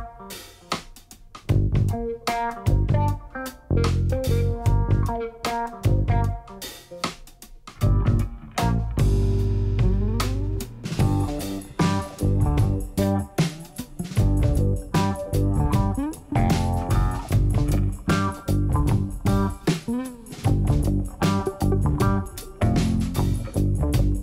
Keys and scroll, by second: 1.0 alt+a, 6.1 d, 9.0 g, 10.1 shift+d, 10.4 x, 17.0 alt+a.